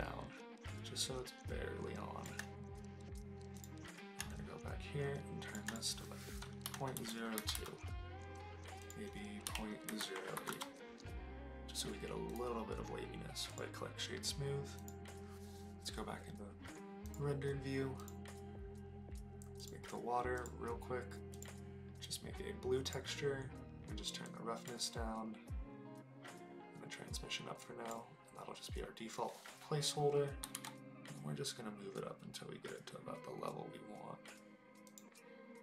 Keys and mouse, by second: 4.3-5.5 shift+drag, 5.7-7.6 drag, 8.8-10.6 drag, 12.3-13.6 drag, 15.3 click, 18.0 click, 19.6 click, 20.3 click, 21.3 click, 24.2 click, 26.9-27.9 drag, 30.4 g, 30.5 z, 34.9 click.